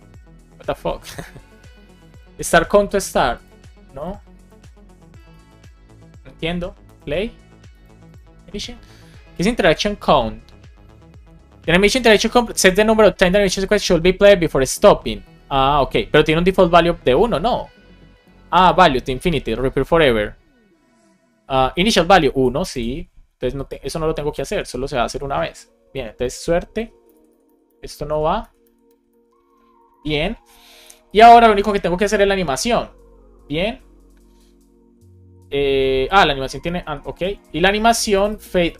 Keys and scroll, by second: 24.2 Left, 26.3 alt+shift+Right, 27.1 alt+shift+Right, 28.0 shift+Right, 29.4 BackSpace, 29.8 super+Left, 31.5 super+c, 36.9 alt+Up, 38.6 super+c.